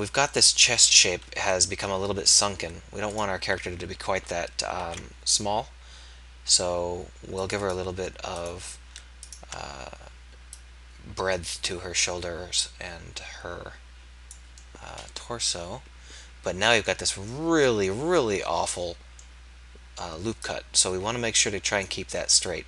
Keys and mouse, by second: 1.4 KP_1, 4.8 ctrl+a.